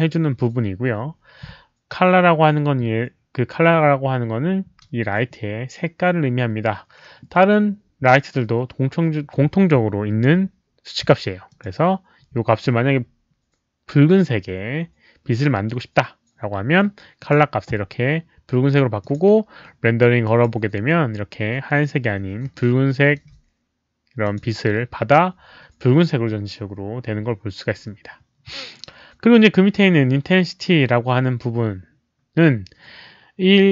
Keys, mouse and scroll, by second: 11.4 click, 17.1 click, 19.0 click, 20.2 click, 22.5 alt+middle click, 24.2 click.